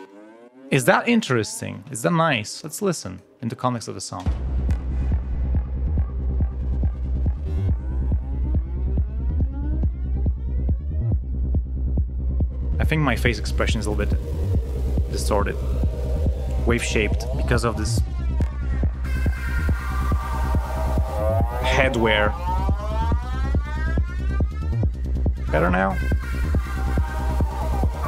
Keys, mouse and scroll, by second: 0.0 click, 1.4 click, 2.0 space, 4.2 space, 27.8 ctrl+scroll down 2.